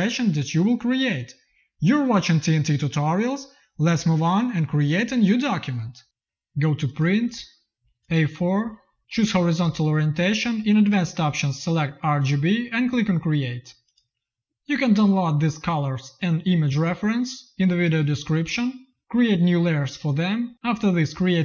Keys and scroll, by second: 0.5 v, 3.5 ctrl+n.